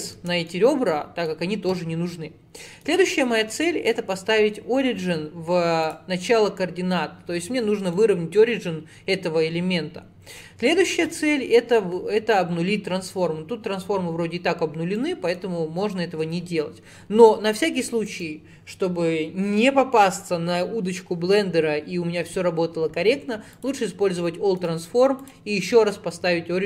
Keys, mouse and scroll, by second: 0.2 Tab, 0.5-2.9 middle drag, 2.9-6.5 right drag, 6.5-9.7 middle drag, 15.0-18.1 middle drag, 18.1-21.3 drag, 24.6-26.6 right drag.